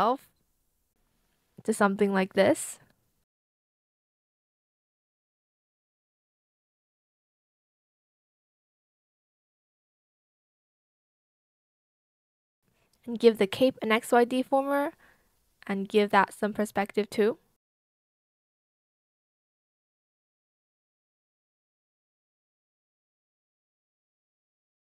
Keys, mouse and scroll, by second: 2.2 ctrl+z, 4.6 shift+click, 5.8 shift+click, 6.4 shift+click, 8.9 ctrl+z, 9.4 ctrl+z, 10.7 shift+click, 11.2 shift+click, 11.5 shift+click, 11.7 shift+Escape, 14.2-15.1 typing, 15.8 shift+click, 17.5 shift+click, 18.6 shift+click, 18.7 shift+click, 19.0 shift+click, 19.2 shift+click, 20.7 shift+click, 20.9 shift+click, 22.0 Return, 23.4 ctrl+z, 24.4 shift+click, 24.6 shift+click.